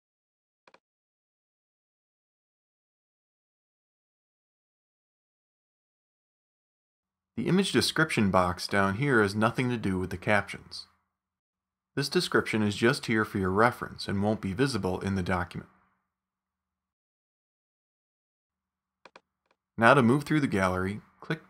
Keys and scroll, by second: 0.0-0.4 typing, 2.0 Down, 3.0 Down, 5.8 Down, 11.8-15.6 typing.